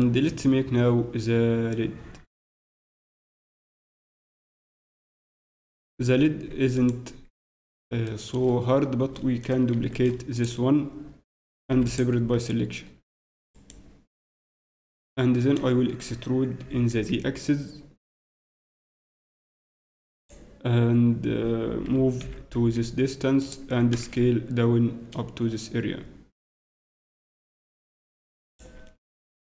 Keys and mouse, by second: 6.5 Tab, 11.7 shift+p, 13.2 Tab, 16.6 a, 16.6 e, 22.2 g, 23.7 s.